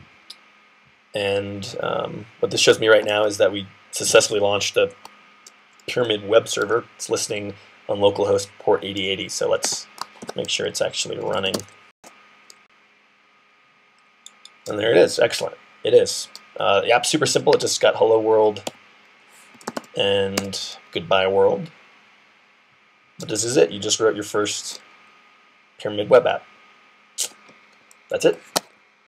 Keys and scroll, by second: 10.0-11.9 typing, 18.5 Right, 19.1-20.1 typing.